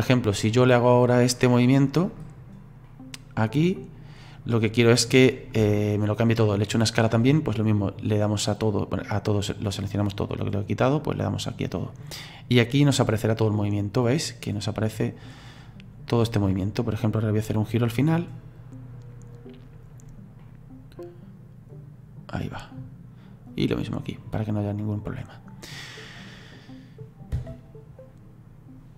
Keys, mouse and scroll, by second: 2.9-8.3 middle drag, 8.3-15.7 drag, 18.6-20.4 drag, 20.4-23.5 middle drag, 23.5 click, 24.7-27.4 drag, 27.4 space.